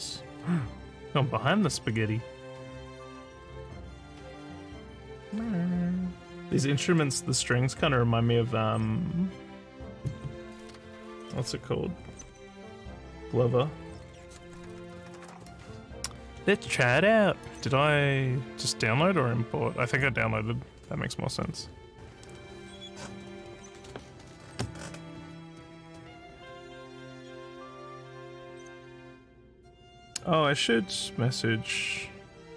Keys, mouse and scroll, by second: 17.4 click, 29.1 s.